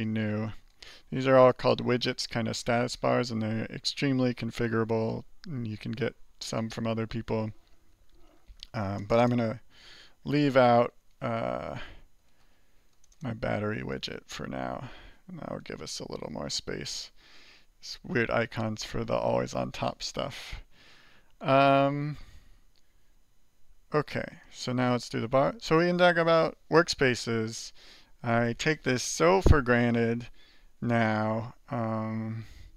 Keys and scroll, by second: 0.0-0.5 typing, 10.6-14.4 typing, 13.8 alt+r, 14.4 alt+r, 19.4 alt+2, 20.2 alt+1, 23.8 alt+2, 24.8 alt+3, 25.3 alt+2, 25.7 alt+1, 26.8 alt+2, 27.7 alt+3, 29.7 alt+4, 30.7 alt+2, 31.2 alt+1.